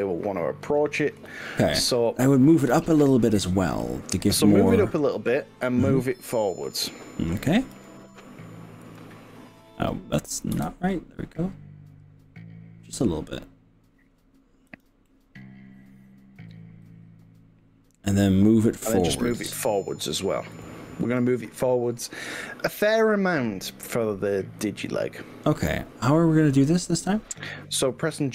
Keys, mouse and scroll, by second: 0.8 click, 1.4 ctrl+z, 2.1 middle click, 3.8 middle click, 5.3 middle click, 6.4-7.4 middle drag, 7.7 g, 8.9 y, 10.6 z, 14.8 drag, 15.1-18.8 middle drag, 18.8 click, 19.5 KP_1, 20.6 KP_3, 21.2 g.